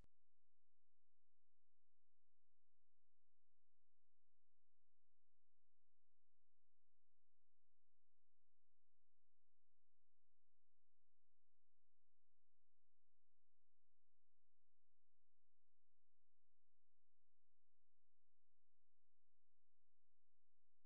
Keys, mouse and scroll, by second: 5.5-12.1 drag, 12.5-14.8 drag, 15.1 click, 18.9-20.7 drag.